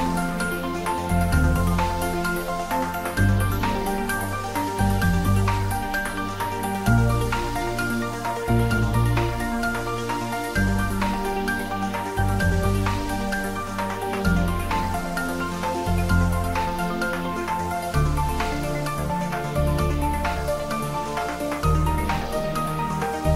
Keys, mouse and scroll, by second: 1.1 ctrl+z, 4.0 click, 4.2 middle click, 4.9 g, 6.1 click, 6.6-7.0 scroll down 1, 7.2-8.4 middle drag, 8.4 ctrl+z, 9.1 g, 9.5 BackSpace, 9.9 click, 10.1 scroll down 1, 10.3 middle click, 10.8-11.1 scroll up 1, 11.1 Tab, 11.3 scroll up 1, 12.0 Tab, 12.6 ctrl+z, 14.2 i, 14.8 click, 15.1 g, 15.9 Right, 16.6 Tab, 16.9 click, 17.1 Tab, 17.3-17.7 scroll down 1, 18.3 Tab, 18.9 x, 19.4 Left, 19.8 click, 19.9 Tab, 20.2 scroll down 1, 20.8 scroll up 1, 21.9 scroll down 1, 22.4 shift+z.